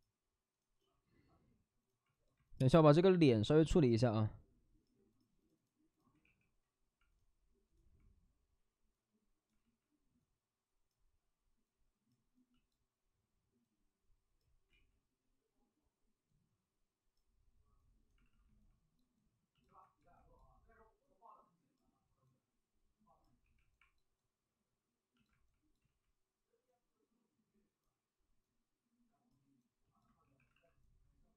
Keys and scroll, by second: 6.2 w, 9.5 ctrl+z, 14.6 ctrl+z, 18.2 alt+s, 23.4 2, 25.8 ctrl+z, 30.2 2, 30.5 alt+s.